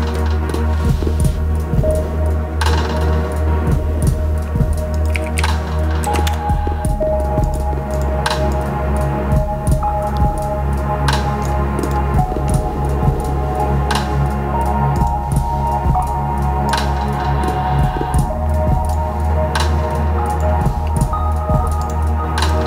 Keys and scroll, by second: 4.8-5.8 typing, 6.0 Down, 6.2 Return.